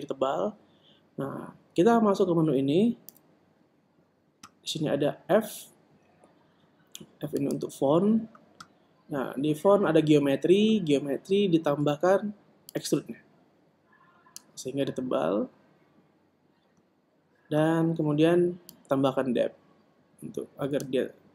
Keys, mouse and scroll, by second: 4.2 n, 8.5 click, 13.8 click.